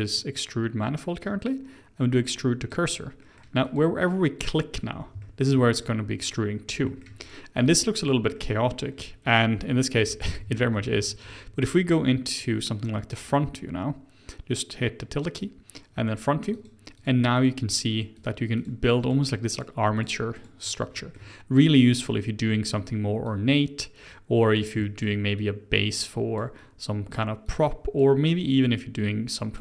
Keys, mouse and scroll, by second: 0.1-3.1 drag, 3.2 middle click, 3.6 click, 4.4 click, 4.7-5.2 scroll down 3, 5.2 shift+middle click, 5.7 click, 6.2 click, 6.5-6.8 scroll down 3, 6.8 shift+middle click, 7.2 click, 7.6 click, 8.3 middle click, 9.0-9.3 scroll down 3, 9.3 middle click, 10.0-10.9 ctrl+z, 11.1 ctrl+z, 11.2 ctrl+z, 13.4 `, 16.5 click, 16.9 click, 17.3 click, 17.7 click, 18.1 click, 18.6 click, 19.0 click, 19.5 click, 19.9 click, 20.3 click, 20.9-23.2 shift+middle drag, 23.2-24.8 drag, 24.8 shift+middle click, 25.4-29.6 drag.